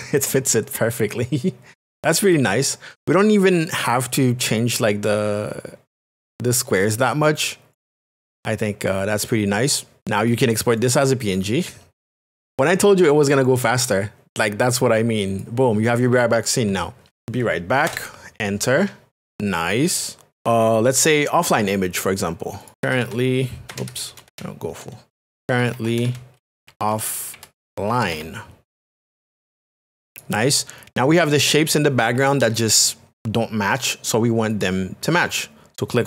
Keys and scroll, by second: 17.2 k, 17.9 Return, 22.7 r, 23.3 e, 23.7 BackSpace, 24.9-28.9 typing.